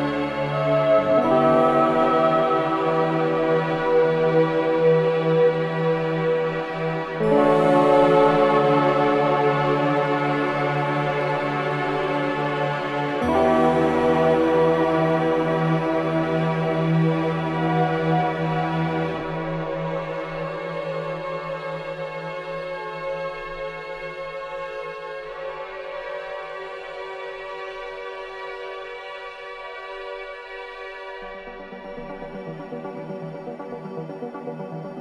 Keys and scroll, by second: 1.5 3, 4.3 ], 6.9 4, 10.2 3, 10.6 ], 11.1 ], 13.1 4, 14.5 3, 15.4 3, 16.6 ], 17.7 ], 20.0 ctrl+z, 22.8 4, 23.7 3, 25.3 4, 28.6 3, 29.0 ], 30.6 4.